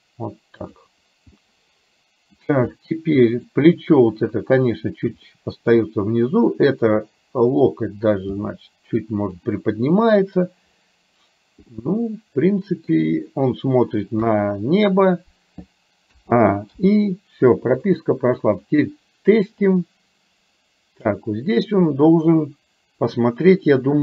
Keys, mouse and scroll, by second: 1.4-2.4 middle drag, 2.8 middle click, 5.3 middle click, 7.5 click, 8.4 g, 11.8-13.0 middle drag, 14.3 KP_3, 16.1 a, 16.8 i, 17.9 click, 18.8-21.1 drag.